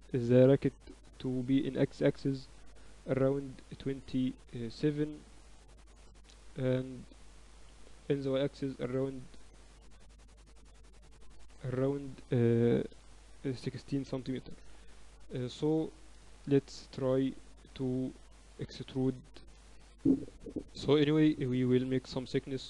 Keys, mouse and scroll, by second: 14.2 n, 15.3 KP_1, 17.3 ctrl+alt+shift+c.